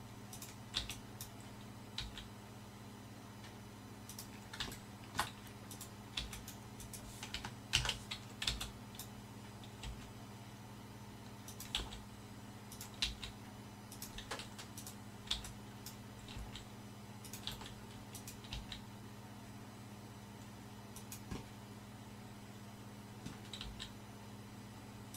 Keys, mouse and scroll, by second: 0.7 b, 2.0 g, 5.9-7.9 drag, 6.9-7.9 right drag, 7.9 ctrl+z, 8.5 b, 9.9 g, 11.8 r, 13.1 g, 14.9 click, 15.4 b, 16.4 g, 17.6 r, 18.5 g, 23.7 g.